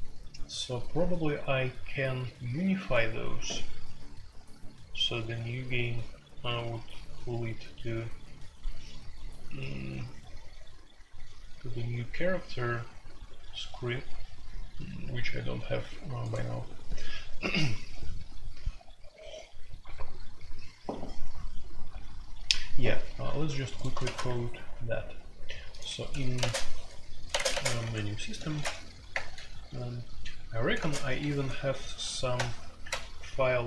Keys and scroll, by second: 0.0-33.6 typing, 25.8 Escape, 26.4 Tab, 27.3 Tab, 29.1 Return.